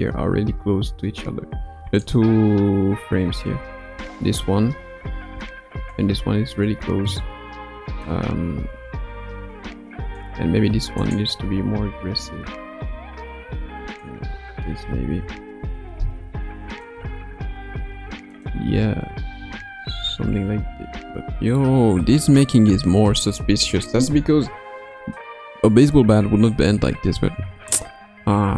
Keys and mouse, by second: 5.4 click, 8.0-10.2 drag, 11.0 click, 12.0 r, 14.8 a, 15.6 i, 16.7 click, 17.0 space, 17.7 space, 18.3 click, 19.4 space.